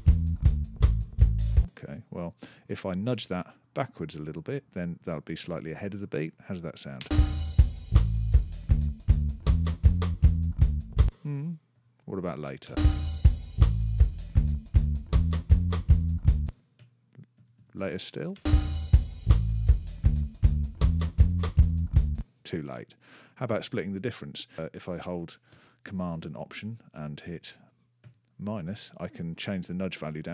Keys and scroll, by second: 1.3 space, 2.9 -, 6.8 space, 10.7 space, 12.5 space, 16.2 space, 16.6 -, 18.2 space, 21.9 space, 27.8 alt+super+-.